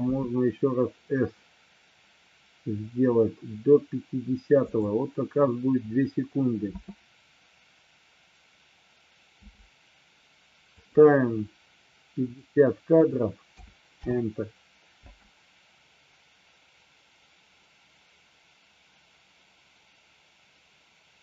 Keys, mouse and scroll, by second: 0.1 s, 4.7 click, 6.7 space, 9.5 space, 10.9 click, 12.5-14.2 drag, 15.1 space.